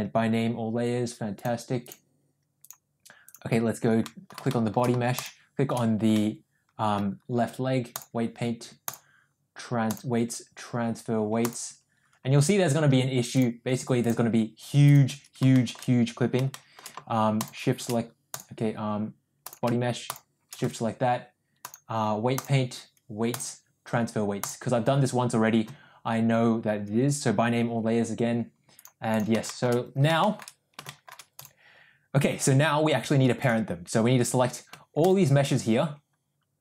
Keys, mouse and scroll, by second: 1.4-2.0 drag, 2.6 click, 4.1 middle click, 4.5 shift+middle click, 5.2 shift+click, 6.2-7.0 middle drag, 8.1-9.0 drag, 10.0-11.7 drag, 13.4-14.2 drag, 15.6 shift+middle drag, 16.5 shift+middle drag, 19.5 click, 20.1 shift+click, 21.6 click, 23.4-24.7 drag, 28.8 click, 29.6 shift+middle click, 30.3 shift+middle drag, 30.9 shift+middle drag, 33.5 click.